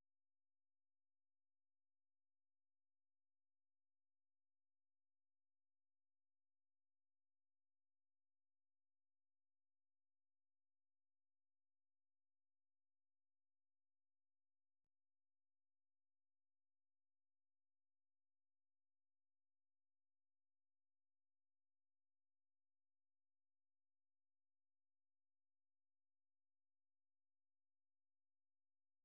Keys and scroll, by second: 9.9-10.7 typing, 11.4 Return, 12.8 typing, 17.2-18.8 typing, 23.4-26.2 typing, 27.5 ctrl+n, 27.7 ctrl+n, 27.9 ctrl+n, 28.1 ctrl+n.